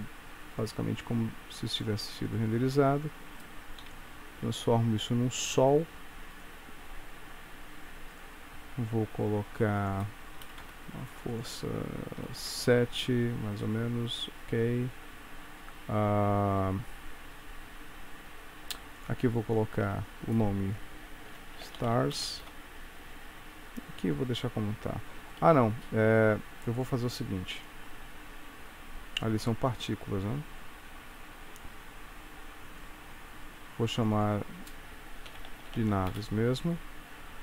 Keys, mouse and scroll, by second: 0.6 click, 2.3 click, 3.9 KP_3, 5.5 g, 7.1 r, 9.9 click, 11.4 click, 13.7 middle click, 14.8 scroll down 3, 15.3 scroll up 1, 19.1 click, 19.9 F2, 22.5 Return, 26.9 click, 31.2 click, 34.0 click, 34.2 click.